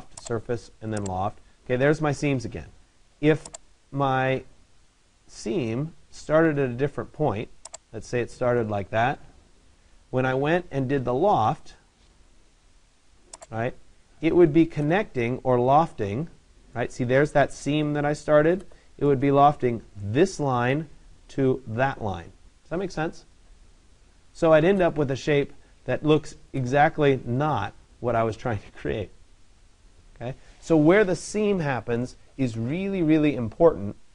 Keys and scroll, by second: 10.8 Return.